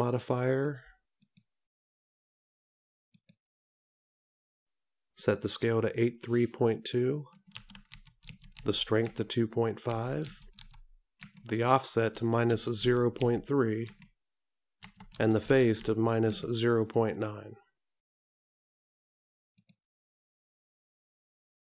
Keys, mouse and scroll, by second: 1.4 click, 5.4 click.